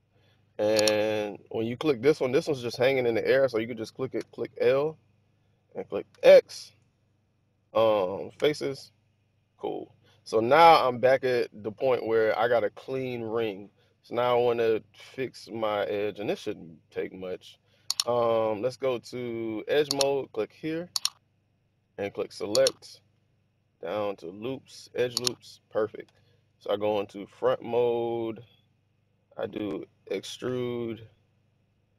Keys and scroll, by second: 1.6-2.3 typing, 4.0 typing, 6.0 typing, 8.2 typing, 14.2 typing, 25.9 1, 30.1 e.